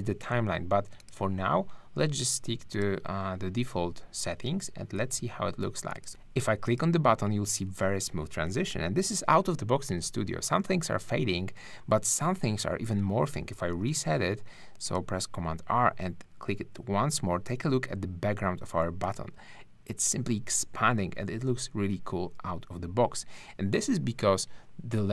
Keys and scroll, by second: 6.1 shift+`, 13.7 super+r.